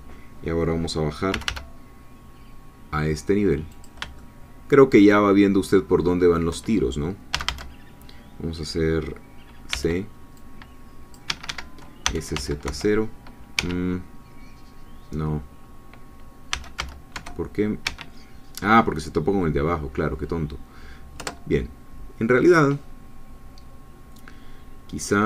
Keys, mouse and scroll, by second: 1.3 g, 3.7 click, 4.2-6.2 shift+middle drag, 7.3 a, 9.7 c, 10.4 click, 11.3 Escape, 12.0 s, 12.3 z, 12.7 0, 13.5 Escape, 16.5 s, 16.8 z, 17.1 0, 17.9 Escape, 21.2 Return.